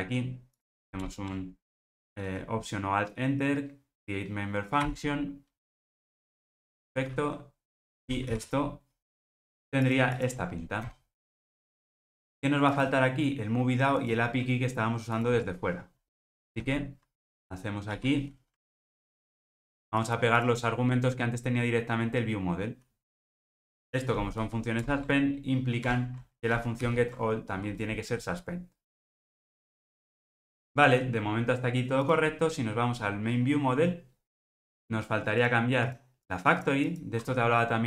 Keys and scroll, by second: 1.0 alt+Return, 8.3 super+v, 18.0 shift+super+v, 24.8 alt+Return, 27.4 alt+super+l.